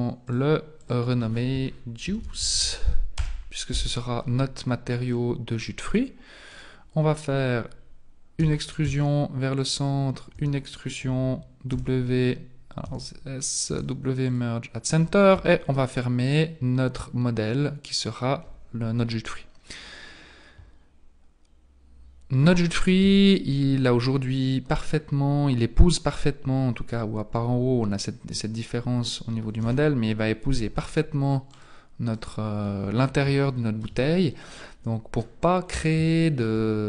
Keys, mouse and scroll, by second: 0.3 click, 0.8 click, 5.1 middle click, 6.5 alt+right click, 8.4 e, 10.4 e, 13.8 w, 15.4 Tab, 15.8 middle click, 23.0 KP_1, 29.6 alt+h, 30.5 z, 31.5 right click, 32.2 right click, 32.8-33.2 scroll up 4, 33.4 shift+middle click, 34.2-35.4 scroll up 2, 35.6-36.0 scroll down 3, 36.1 shift+middle click.